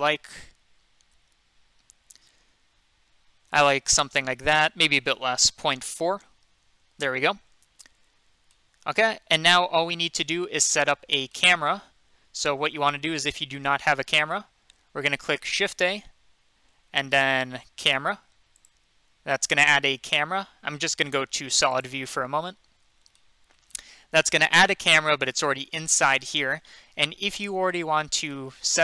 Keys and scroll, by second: 5.7-6.1 typing, 13.3 n, 15.9 a.